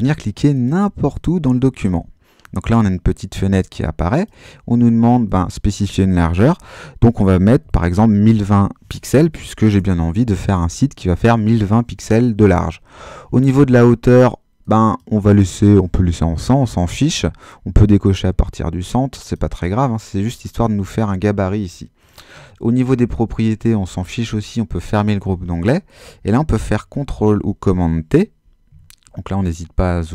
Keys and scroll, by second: 7.3-9.7 typing, 26.7 super+t, 28.6 super++.